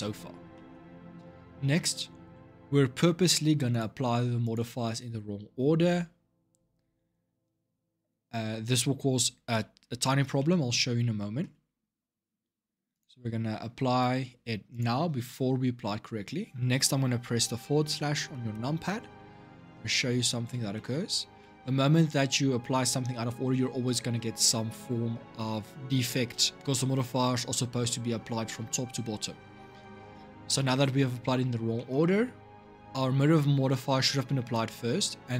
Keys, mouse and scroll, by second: 3.0 Tab, 3.5 click, 4.2 click, 9.7-12.7 shift+middle drag, 12.7-15.7 drag, 18.3 KP_Divide, 19.1-19.5 scroll up 7, 19.5-20.9 middle drag, 20.9 scroll up 5, 21.2-21.9 middle drag, 21.9-22.4 scroll down 1, 30.2-34.6 middle drag.